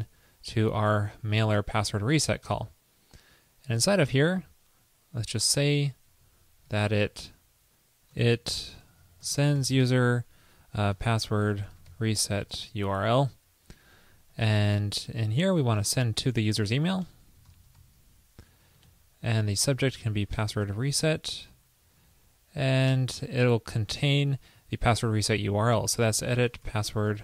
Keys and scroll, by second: 6.8 alt+Left, 8.3 alt+shift+Left, 14.5 alt+Right, 16.1 alt+shift+Left, 16.2 alt+shift+Left, 19.0 alt+Right, 21.7 alt+Left, 22.4 alt+shift+Right.